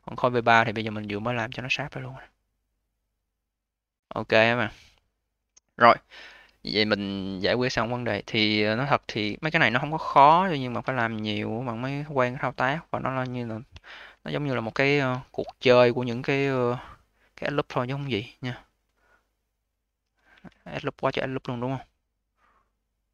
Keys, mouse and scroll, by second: 0.5-1.0 scroll up 4, 1.0-1.5 alt+middle drag, 1.5-2.2 alt+drag, 2.2 alt+middle click, 2.6-3.9 alt+drag, 3.9 alt+middle click, 4.4 alt+click, 5.2-5.9 alt+middle drag, 5.9-6.4 scroll down 2, 6.4-8.0 alt+middle drag, 8.0-9.1 alt+drag, 9.1 v, 10.0 q, 10.7 a, 12.2 click, 13.7 1, 15.0 q, 15.5-16.3 alt+middle drag, 16.3 a, 17.4 click, 17.8-20.2 right drag, 20.2 1, 20.8-21.1 scroll up 1, 21.1-21.8 alt+drag, 21.8 alt+middle click, 22.3-23.0 alt+drag, 23.0 alt+middle click.